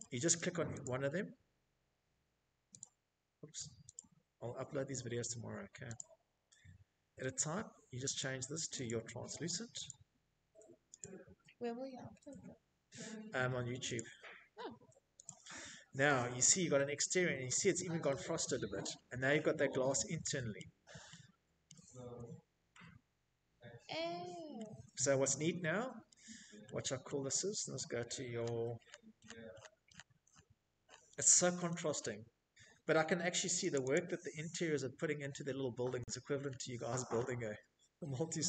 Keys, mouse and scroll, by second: 0.3 Escape, 1.1 click, 3.1 click, 5.3 click, 6.0 click, 7.0 click, 8.1 click, 11.1 click, 12.0 right click, 12.4 click, 13.3 middle click, 13.4 middle click, 15.2 shift+middle click, 15.3 shift+middle click, 15.5-16.7 scroll, 16.4 right click, 18.2-19.4 shift+scroll, 20.6 shift+middle click, 21.7 shift+middle click, 22.9 middle click, 23.0 middle click, 23.4 middle click, 24.2 middle click, 25.5-26.8 middle click, 26.6 middle click, 27.0-27.7 scroll, 28.1-29.3 scroll, 30.8 click, 31.0 click, 33.0-34.3 scroll, 37.8 click.